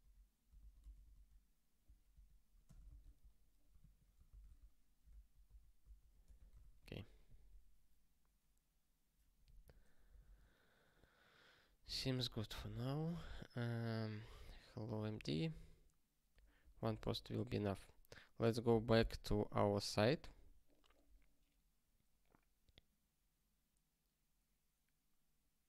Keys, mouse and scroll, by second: 0.8 alt+d, 1.0 alt+d, 2.1 ctrl+BackSpace, 2.4-3.3 typing, 3.8 ctrl+/, 5.0 alt+b, 5.4 alt+b, 6.2 BackSpace, 6.6 ctrl+s, 12.5 super+b.